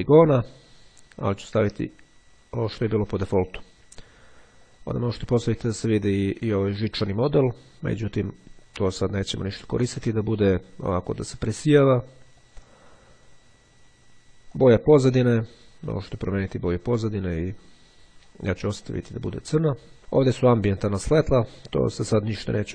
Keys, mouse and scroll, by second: 2.0 click, 4.8 click, 8.1 click, 9.2 click, 12.4 click, 14.7 click, 16.3-18.2 drag, 19.0 click.